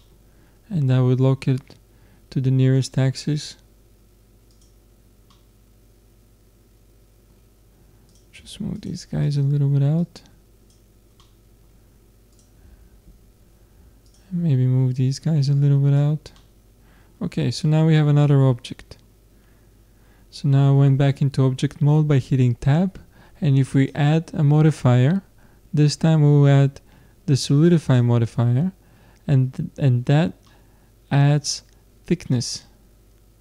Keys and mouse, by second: 5.3-7.2 middle drag, 8.1-11.3 drag, 11.3 middle click, 12.4 click, 12.7 middle click, 12.8-16.4 drag, 12.8 middle click, 16.4 middle click, 17.3 middle click, 17.5 Tab, 20.0-22.8 middle drag, 23.8-25.6 drag, 28.7-33.4 middle drag.